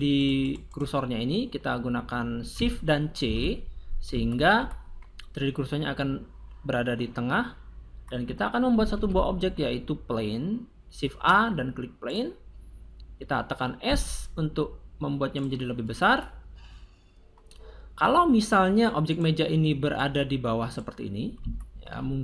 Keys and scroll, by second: 3.2 shift+c, 8.8 shift+a, 13.9 s.